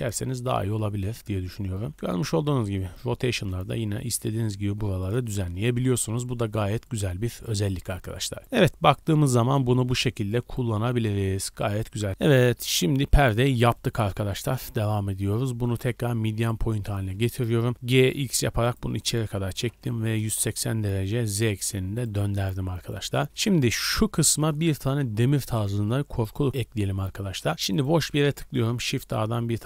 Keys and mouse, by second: 1.9-4.9 drag, 1.9 r, 5.5 Tab, 5.5-12.1 drag, 12.1-12.7 middle drag, 12.7 click, 12.8 middle click, 12.9 drag, 13.0 middle drag, 13.1 click, 17.6 g, 19.5 r, 23.1-28.1 shift+middle drag, 28.2 shift+a.